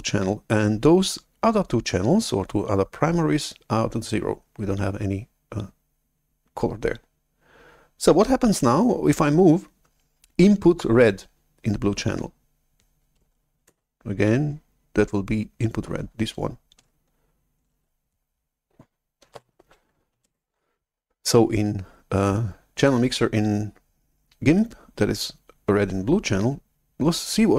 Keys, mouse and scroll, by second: 19.4 shift+super+F11, 20.2 alt+Tab, 27.4-27.5 drag.